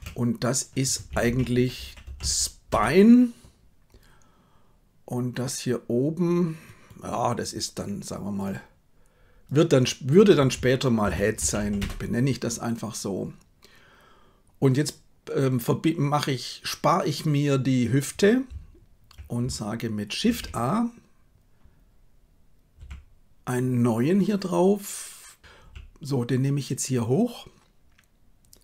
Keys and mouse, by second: 8.4-11.8 drag, 20.2 shift+a, 22.8 g.